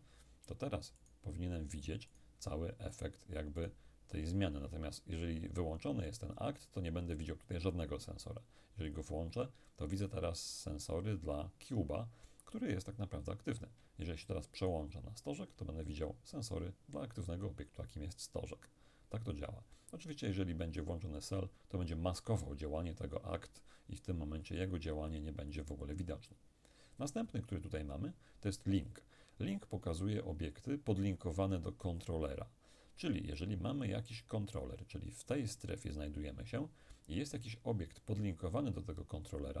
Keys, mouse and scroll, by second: 1.1 shift+right click, 3.1 shift+right click, 9.0 click, 14.7 shift+right click, 21.3 click, 24.7-26.6 drag, 27.2 click.